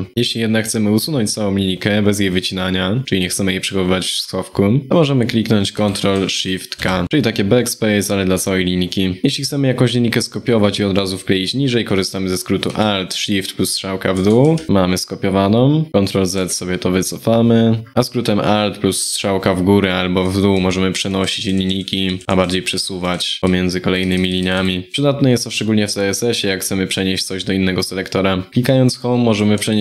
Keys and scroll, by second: 20.2 alt+Down, 20.6 alt+Down, 20.9 alt+Down, 21.2 alt+Down, 29.2 ctrl+Right, 29.7 ctrl+Right.